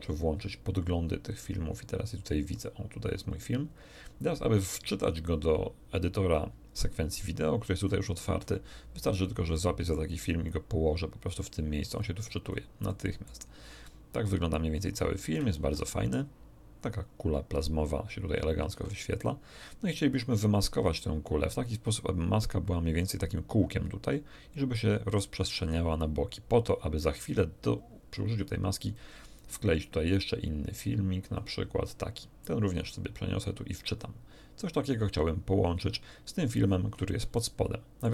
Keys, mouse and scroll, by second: 0.7-2.7 drag, 7.8-8.6 scroll up 2, 9.5 click, 11.9-12.7 scroll up 4, 12.9 middle click, 13.8 click, 15.5 alt+click, 15.5 alt+a, 18.7 alt+a, 20.1-21.7 drag, 28.9-31.5 drag, 32.4 click, 34.5-35.9 drag, 36.6-37.1 scroll up 1, 37.3 ctrl+middle click.